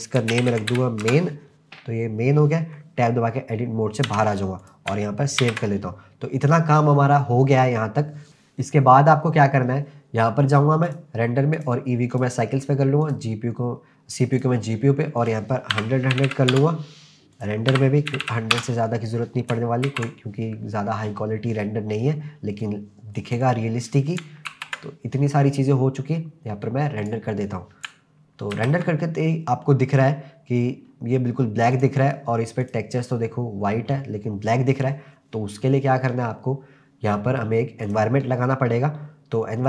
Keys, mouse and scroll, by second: 4.1 Tab, 4.6 click, 5.4 ctrl+s, 5.9-6.3 scroll down 3, 10.9 click, 11.6-12.2 drag, 13.0-14.5 drag, 15.2-16.5 drag, 16.3 0, 17.3-18.5 drag, 18.2 0, 19.9 ctrl+s, 22.1-22.9 scroll up 2, 23.4 click, 24.5 ctrl+s, 27.2 click, 28.6 ctrl+s, 29.0-29.8 scroll down 1, 29.8-30.5 scroll up 3, 30.7-31.1 scroll down 1, 31.3 scroll down 1, 31.7 click, 32.6 click, 35.3-35.7 scroll down 2, 37.9 click.